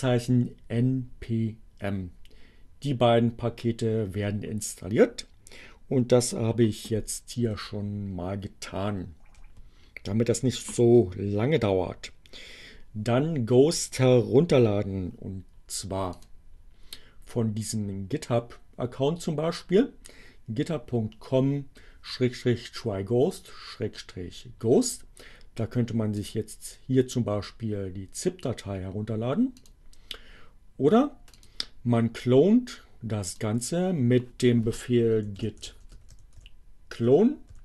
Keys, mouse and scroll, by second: 6.4 BackSpace, 16.0 click, 26.2 click, 29.4 click, 31.3 click, 32.3-33.6 drag, 34.5-37.6 typing.